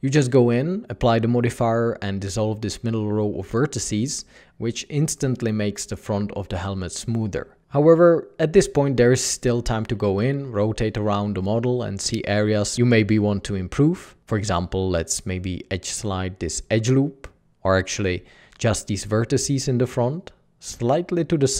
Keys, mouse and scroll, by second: 0.3 Tab, 2.9 Tab, 6.4 Tab, 7.4 alt+a, 11.2 alt+a, 11.3 Tab, 15.2 Tab, 21.2 alt+a.